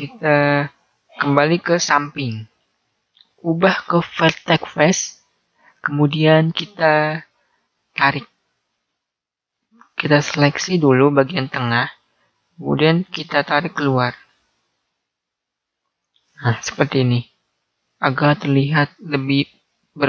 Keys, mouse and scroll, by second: 0.0-1.6 middle drag, 4.8 click, 7.5 right click, 9.5 middle click, 13.4 click, 16.3-18.2 middle drag, 18.8-20.0 middle drag.